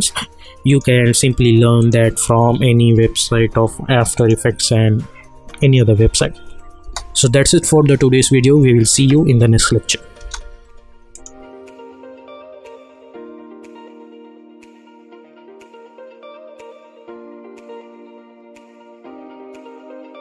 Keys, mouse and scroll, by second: 4.1 click, 6.0 u, 6.8 space, 10.2 space, 11.1 click.